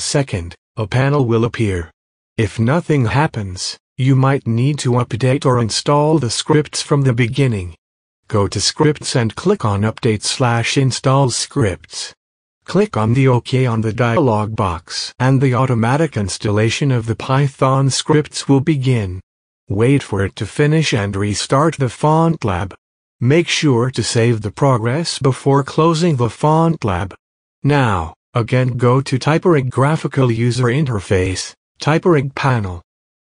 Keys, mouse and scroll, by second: 0.9 click, 8.7 click, 11.3 click, 11.5 click, 17.7 click, 20.7 click, 26.1 click, 26.6 click, 27.8 click, 27.9 click.